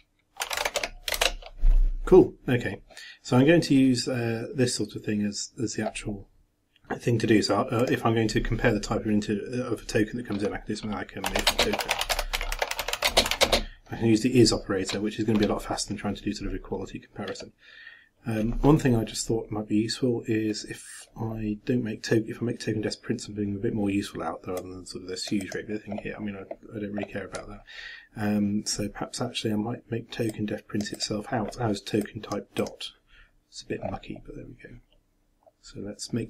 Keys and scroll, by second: 1.2 Return.